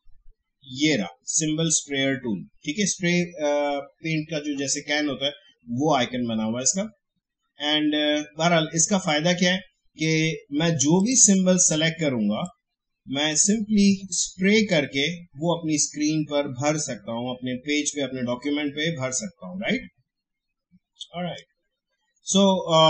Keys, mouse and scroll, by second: 7.1 shift+scroll down 1, 11.0-22.4 drag.